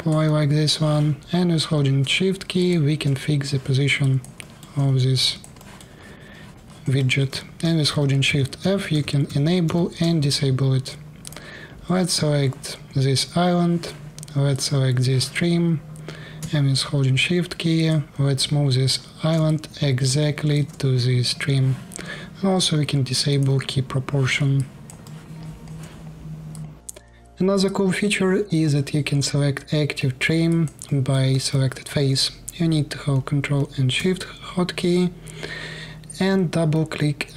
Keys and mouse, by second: 2.4-3.7 shift+middle drag, 3.7 alt+click, 3.9 alt+middle click, 4.4 click, 5.1 alt+middle click, 5.4 alt+click, 5.5 alt+middle click, 5.9-7.0 alt+drag, 7.6-9.4 typing, 9.7-11.0 middle drag, 14.2 middle click, 17.6-19.1 shift+middle drag, 19.1-23.2 alt+drag, 23.8-24.8 drag, 24.2 alt+middle click, 24.2 alt+right click, 24.7 alt+middle click, 24.7 alt+right click, 25.1 alt+click, 26.3 middle click, 26.8 click, 27.0 middle click, 27.4-31.4 alt+drag, 31.7 click.